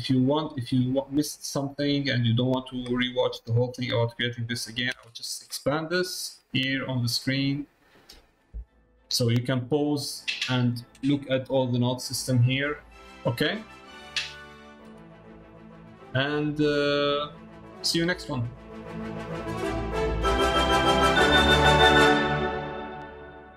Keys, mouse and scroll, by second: 0.2 middle click, 0.9 middle click, 1.8 middle click, 4.9 ctrl+space, 5.7-7.1 middle drag, 15.1 ctrl+space, 16.3 middle click.